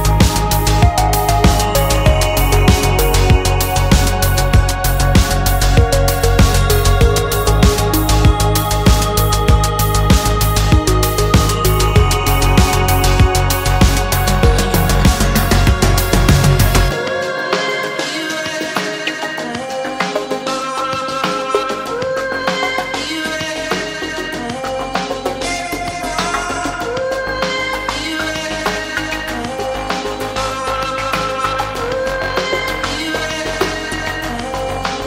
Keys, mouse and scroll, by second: 1.2 click, 2.4 click, 3.8 click, 6.5 click, 7.5 click, 10.8 click, 12.2 click, 13.3 click, 15.8 click, 16.8-17.5 scroll down 2, 17.8-18.9 scroll down 2, 19.8 click, 22.5 click, 23.8 middle click, 24.7 click, 27.1-30.7 drag, 32.1 click, 32.4-33.1 scroll down 2, 33.4-35.0 scroll down 7.